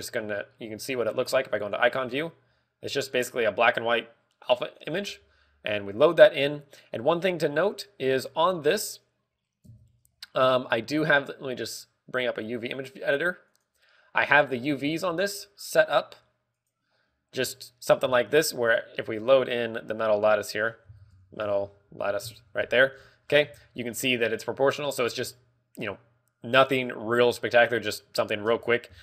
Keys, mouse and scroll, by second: 5.7 click, 9.0 click, 10.6 Tab, 12.6 click, 13.5 click, 13.6 Tab, 14.4 click, 15.4 Tab, 15.4 click.